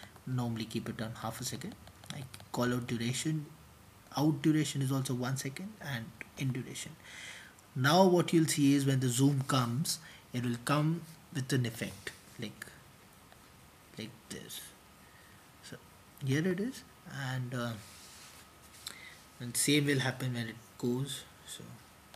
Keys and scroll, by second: 4.7-7.4 typing, 6.6 Return, 12.1 Return, 12.6 super+t, 16.5 typing, 16.7 Return, 19.6 typing.